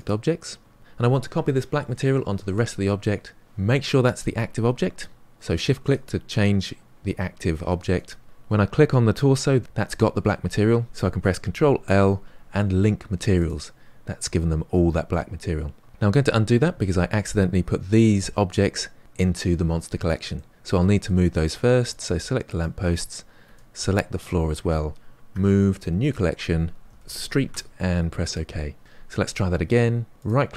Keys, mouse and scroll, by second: 0.0-5.2 right drag, 5.2 shift+click, 5.5 shift+click, 5.8 shift+click, 6.4 shift+click, 8.0 shift+click, 13.4 ctrl+l, 16.5 ctrl+z, 20.3-22.5 middle drag, 22.5 click, 27.4 e, 30.2 click.